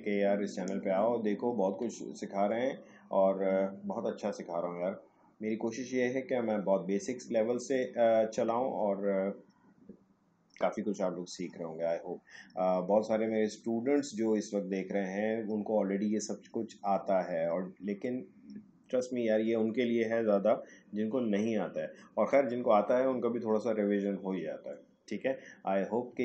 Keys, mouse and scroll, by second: 0.3 alt+scroll down 1.